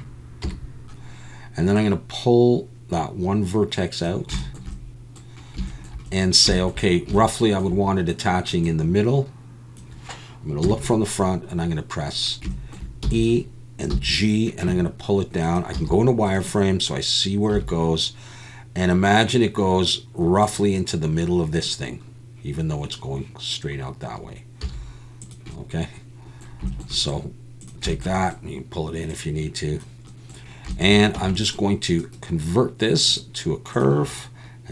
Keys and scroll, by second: 0.4 KP_7, 10.6 KP_1, 13.0 e, 13.9 g, 15.7 z, 17.5 g, 24.6 z, 31.2 Tab.